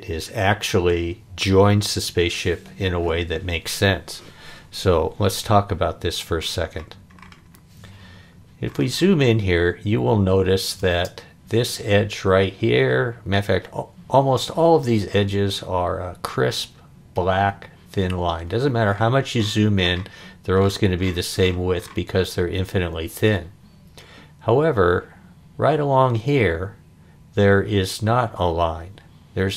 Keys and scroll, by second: 10.8 space.